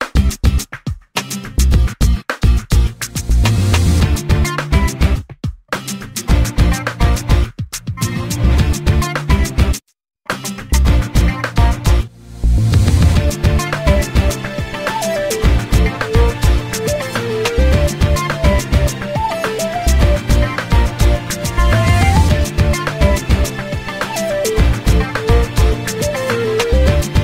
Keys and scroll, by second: 14.0 p.